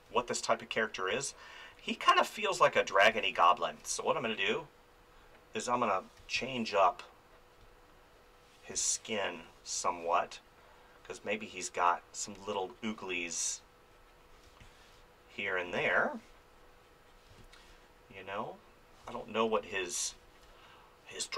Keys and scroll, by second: 0.1 space, 6.2 space, 8.7 space, 14.4 space, 19.0 space.